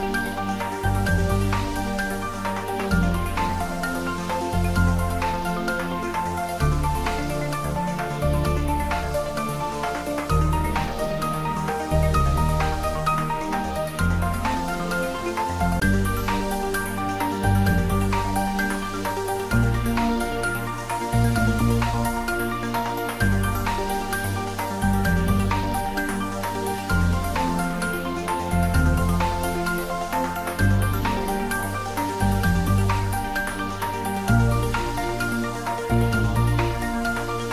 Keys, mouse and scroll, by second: 0.6 g, 1.4 ctrl+z, 2.5-3.2 scroll down 1, 3.2 click, 3.8 ctrl+z, 5.5 ctrl+z, 6.5 ctrl+z, 8.0-10.2 shift+drag, 10.2 shift+d, 12.1-13.2 typing, 14.2 click, 14.6-15.1 scroll down 1, 15.8-16.8 typing, 21.2 Down, 22.1 click, 23.3-23.6 scroll up 1, 24.2-26.4 middle drag, 26.4 shift+z, 28.2 scroll up 1, 29.9-33.3 middle drag, 34.4 click, 36.8 shift+z, 37.4 click.